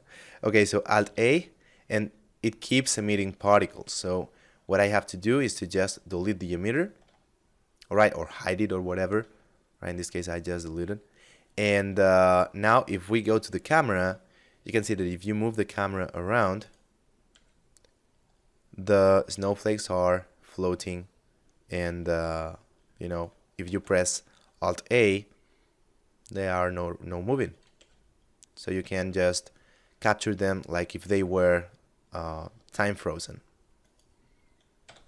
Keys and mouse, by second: 0.1 alt+a, 3.1 alt+a, 4.6 click, 6.3 shift+middle click, 8.6 shift+middle click, 9.2 middle click, 11.0 shift+middle click, 12.1 KP_0, 13.7 g, 15.7 right click, 16.5 g, 22.3 right click, 22.8 alt+a, 27.0 g, 33.1 right click, 34.1 a.